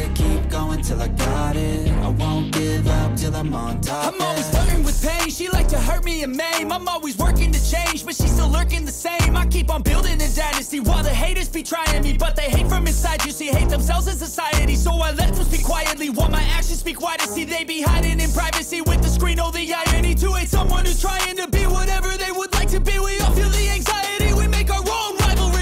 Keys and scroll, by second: 1.3 ], 6.7 ctrl+=, 7.7 ctrl+=, 22.1 ctrl+=.